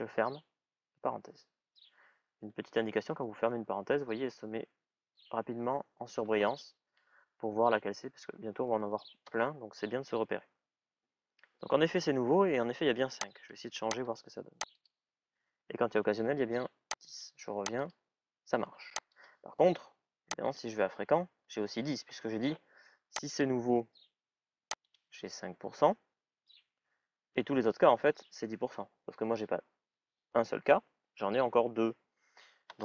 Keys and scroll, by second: 2.3 BackSpace, 9.0 Return.